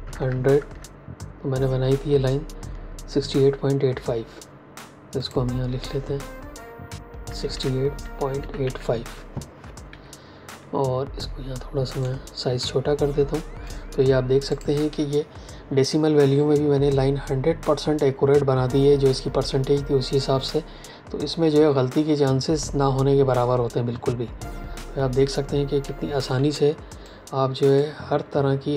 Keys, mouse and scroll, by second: 0.5 KP_Enter, 5.1 click, 7.2-8.5 typing, 9.8 Escape, 14.4 click, 26.3 v, 27.0 click.